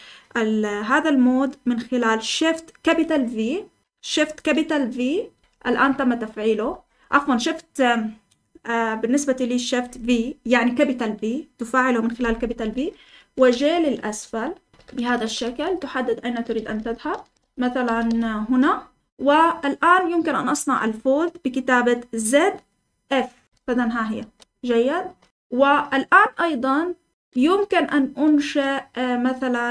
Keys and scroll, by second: 5.4 shift+v, 13.4-18.5 typing, 23.4 Escape, 23.4-25.6 typing.